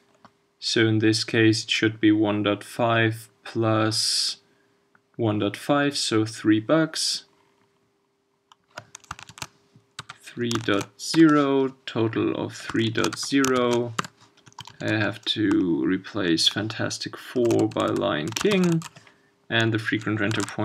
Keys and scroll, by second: 20.4 super+s.